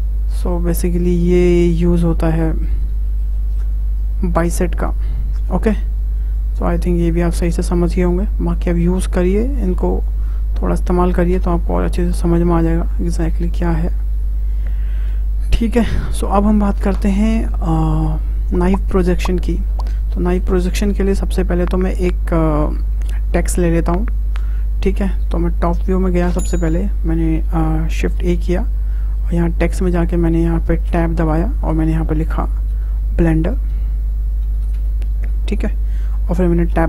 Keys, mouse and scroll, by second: 0.8 scroll down 2, 1.0 scroll up 1, 1.0-2.8 middle drag, 2.8 scroll down 2, 3.1-6.3 shift+middle drag, 6.3-8.8 drag, 8.8 Tab, 9.3-9.7 scroll down 2, 9.7-10.0 middle drag, 10.0 click, 11.7-12.2 middle drag, 12.2 Tab, 13.5-14.4 scroll up 2, 14.4 Delete, 15.3-15.7 scroll down 2, 15.7 shift+middle click, 16.3 `, 19.8-22.9 shift+middle drag, 28.2 shift+a, 30.9 Tab, 33.7 l.